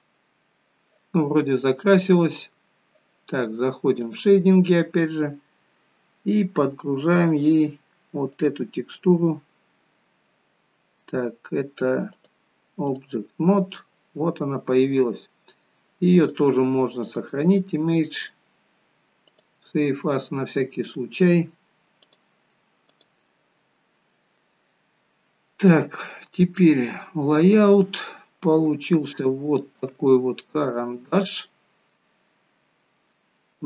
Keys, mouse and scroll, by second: 8.3 click, 26.7 click, 27.6 scroll up 2, 28.4-29.1 scroll down 2, 29.2 shift+middle click, 30.1 middle click, 32.7 scroll down 1, 33.1 shift+middle click.